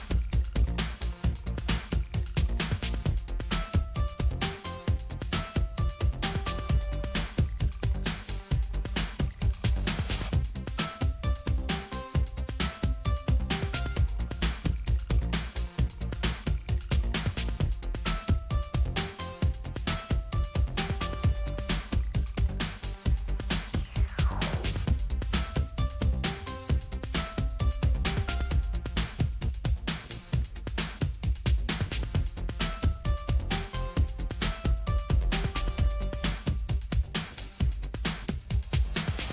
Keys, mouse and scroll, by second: 2.0-6.8 drag, 7.2 click, 9.4 click, 11.4 click, 12.6 click, 15.1 click, 16.5 click, 22.7 click, 26.2 click, 29.0-32.2 drag, 32.7 click.